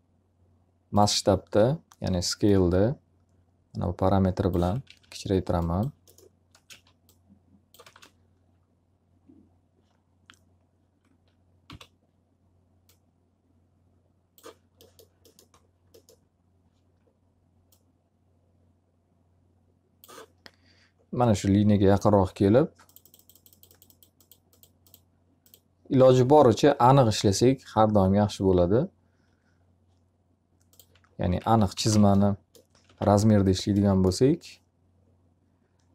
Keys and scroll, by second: 4.3 w, 6.4 space, 6.6 s, 7.8 space, 11.6 r, 30.9-33.4 typing, 31.9 alt+a.